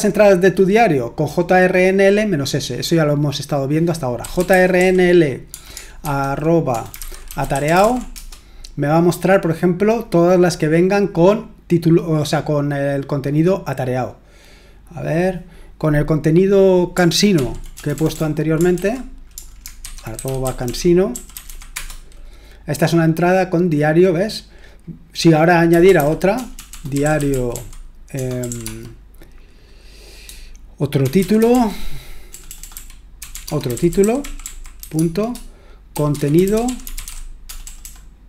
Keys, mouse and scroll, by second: 0.0-4.2 scroll down 1, 4.0-8.3 typing, 17.3 ctrl+p, 17.7 BackSpace, 17.9 BackSpace, 18.1 BackSpace, 18.7 ctrl+w, 19.6-21.9 typing, 25.4-28.9 typing, 30.8-38.2 typing.